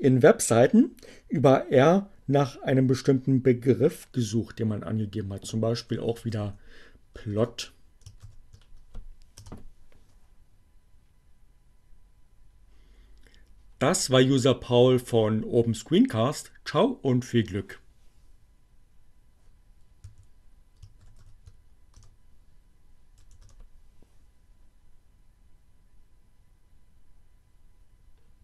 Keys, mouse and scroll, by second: 5.7-6.6 typing, 8.3 shift+9, 8.9 Return, 14.8 click, 18.8 q, 21.0 shift+8, 21.4 Return, 22.9 Return.